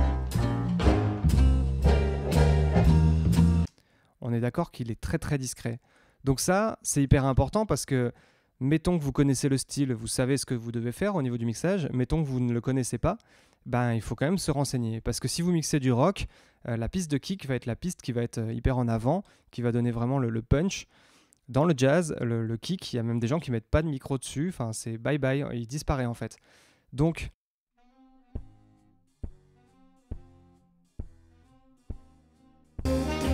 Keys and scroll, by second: 3.6 space, 27.0 space.